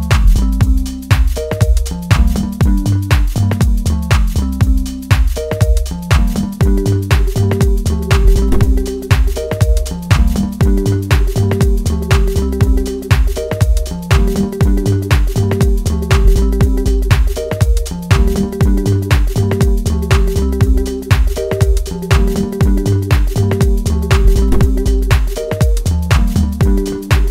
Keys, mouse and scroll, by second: 11.3 scroll down 1, 11.6-15.2 middle drag, 15.2-15.7 scroll up 1, 15.7 middle click, 17.1 alt+click, 19.7 middle click, 20.7-22.7 drag, 22.7-25.0 middle drag, 25.0-25.6 scroll up 2, 25.6 shift+middle click, 26.8-27.3 drag.